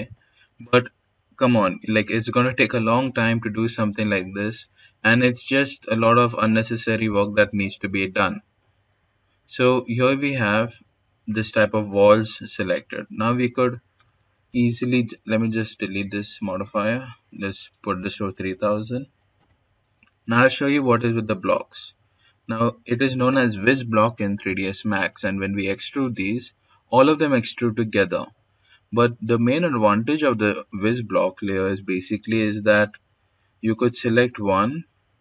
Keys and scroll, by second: 16.8-18.2 typing.